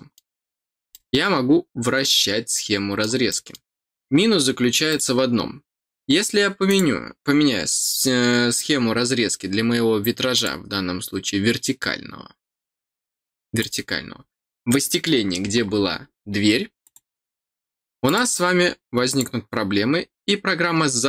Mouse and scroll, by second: 0.9-3.0 middle drag, 3.2 middle click, 4.8 click, 6.6 click, 10.3 click, 13.5 click, 16.8 click, 18.0 click, 19.0 click.